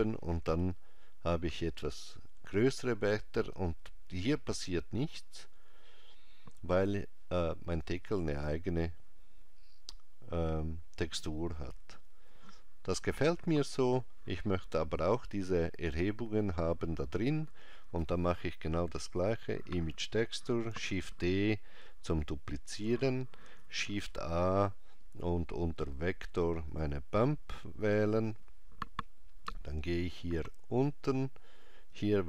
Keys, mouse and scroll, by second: 19.2 click, 20.7 shift+d, 29.7 click.